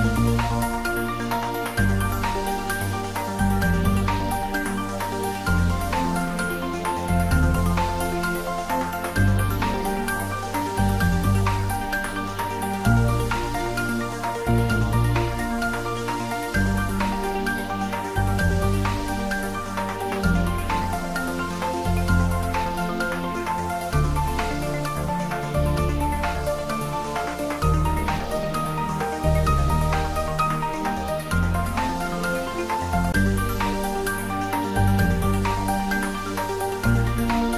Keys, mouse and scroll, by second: 0.1 click, 5.9 click, 6.2 click, 8.1 click, 10.3 click, 13.5-14.8 scroll down 1, 16.9-19.0 scroll down 1, 19.0 click, 19.2 Tab, 19.8 click, 22.4 x, 24.0 click, 27.4 click, 27.6 ctrl+z, 30.1 click, 33.6 x, 35.3 click.